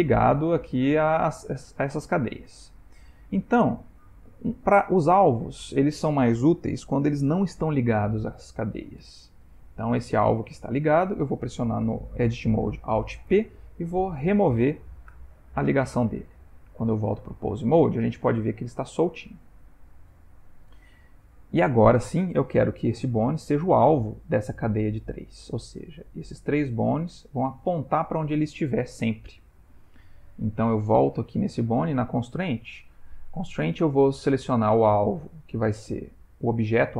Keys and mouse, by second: 2.6 Tab, 4.1 Tab, 5.2 click, 10.0 g, 13.1 alt+p, 15.3 Tab, 17.9 g, 22.7 g, 30.8 click, 34.5 click.